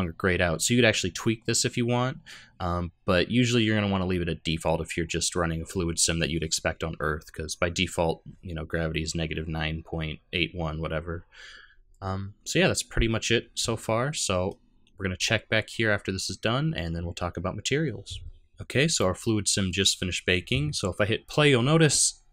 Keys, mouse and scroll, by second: 12.0-13.8 scroll down 1, 13.8 middle click, 13.8 scroll down 1, 18.0 middle click, 21.2 click.